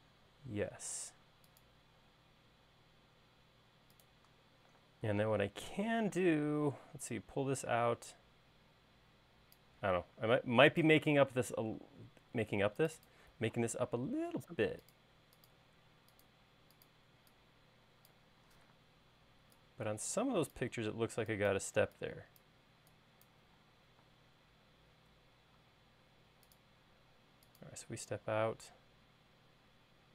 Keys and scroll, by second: 1.5 l, 6.9 p, 14.3 l, 16.4 l, 17.8 e, 19.4 p, 21.5 e, 24.8 space.